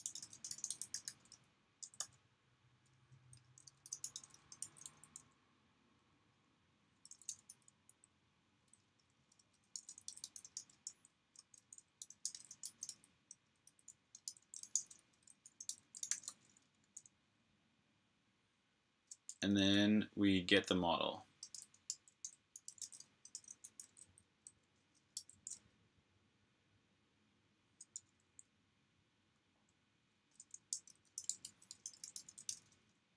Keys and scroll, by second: 0.0-1.6 typing, 3.2 Return, 3.4-5.1 typing, 6.5-10.7 typing, 11.8-13.0 typing, 16.7-17.5 typing, 21.4-24.4 typing, 27.0-32.1 typing.